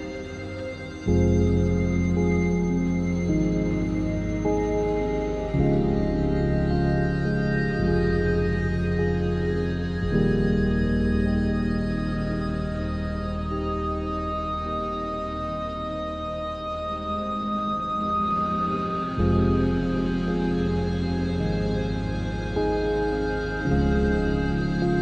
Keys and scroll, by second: 0.6 7, 0.9 Tab, 1.3 a, 2.6 7, 3.0 z, 3.6 Tab, 5.2 Tab, 6.5 0, 6.8 z, 15.1 Tab, 16.1 1, 16.5 3, 17.9 s, 18.7 0, 19.9 ctrl+s, 20.2 z, 22.1 3, 22.5 a, 22.8 z.